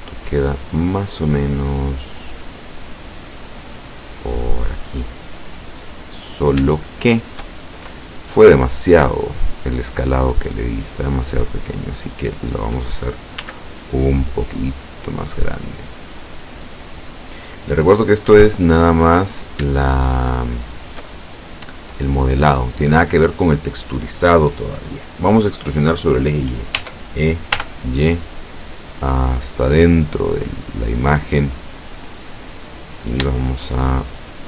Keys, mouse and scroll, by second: 0.7-3.7 drag, 4.2 click, 5.0-6.0 middle drag, 6.0-6.5 scroll up 1, 7.0 shift+middle click, 7.5 shift+scroll up 1, 7.7 shift+scroll down 1, 8.3 middle click, 9.2 middle click, 9.8 middle click, 11.5-13.0 drag, 13.5 s, 16.7 click, 18.5 middle click, 19.3 scroll up 1, 19.9 shift+scroll up 1, 19.9-21.1 shift+middle drag, 21.3-22.7 shift+middle drag, 26.9 e, 27.6 y, 30.6 click, 32.1 middle click, 33.4 shift+middle click, 34.0-34.4 shift+scroll up 2.